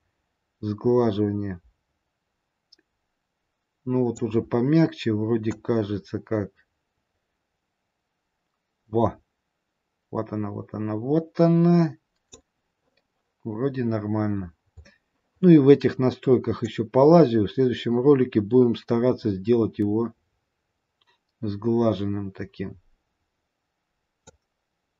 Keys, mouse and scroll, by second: 5.8 click, 14.4-15.4 scroll down 7, 16.5 click, 16.5-17.4 scroll down 6.